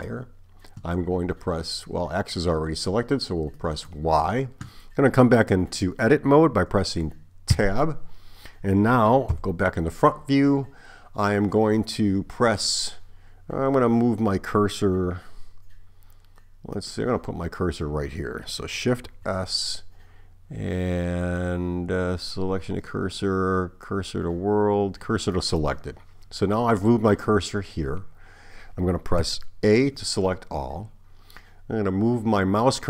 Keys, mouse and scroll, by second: 3.6 click, 7.6 Tab, 9.3 KP_1, 16.8 click, 19.1 shift+s, 29.2 a.